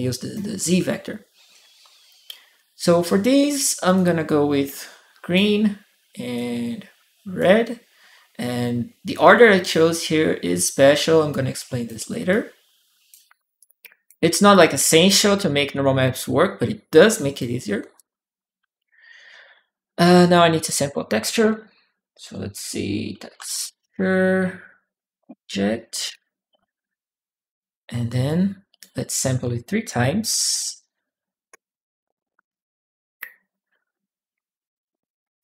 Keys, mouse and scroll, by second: 3.7-5.1 drag, 6.1-7.2 drag, 8.9 click, 10.7 click, 12.1 click, 13.4 click, 14.3 click, 14.6 click, 15.7-17.2 drag, 17.7 click, 19.7 right click, 20.4 right click, 22.8-25.6 typing, 25.8 Return, 28.0 click, 29.8-31.0 typing, 31.3 Return, 34.1 ctrl+w, 34.4 ctrl+w, 35.2 click.